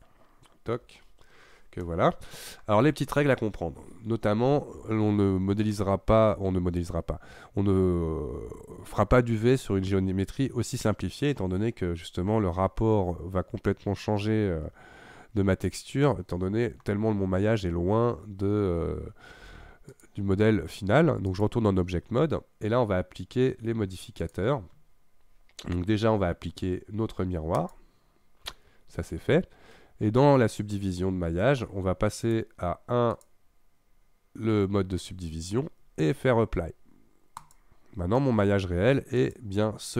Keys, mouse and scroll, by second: 0.8 n, 1.8-4.8 middle drag, 5.8-8.8 middle drag, 11.4-14.5 middle drag, 16.0-19.1 middle drag, 19.9-22.9 drag, 24.3 click, 27.6 click, 32.3 click, 33.1 click, 37.4 click, 38.2-39.2 middle drag, 39.2 click.